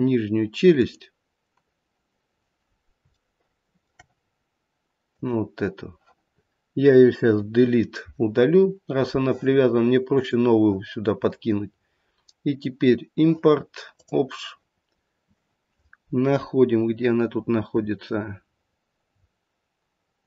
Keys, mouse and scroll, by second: 0.7 click, 2.3-2.9 scroll up 1, 2.9 scroll up 1, 3.1 shift+middle click, 4.2-5.1 scroll up 1, 5.1 click, 7.2 Delete, 8.6-10.1 scroll down 2, 10.1 click.